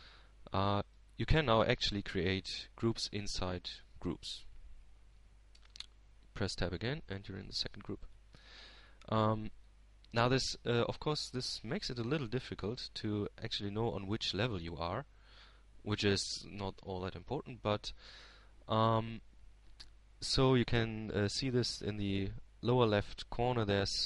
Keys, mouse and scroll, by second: 0.2-1.8 drag, 3.9-5.0 drag, 9.2 Tab, 10.9-12.5 middle drag, 13.3-15.1 drag, 15.4-16.9 drag, 17.3-18.7 middle drag, 19.6-21.0 drag.